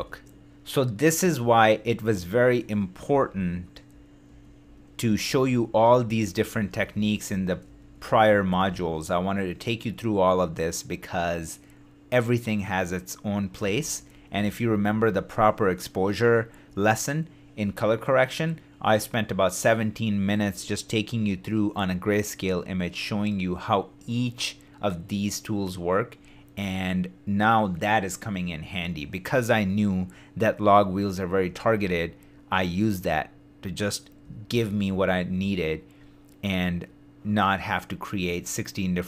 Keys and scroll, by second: 0.7 super+z, 1.4 shift+d, 3.1 shift+d, 3.9 shift+super+d, 4.6 super+d, 5.1 shift+super+d, 13.7 shift+d, 31.5 super+d.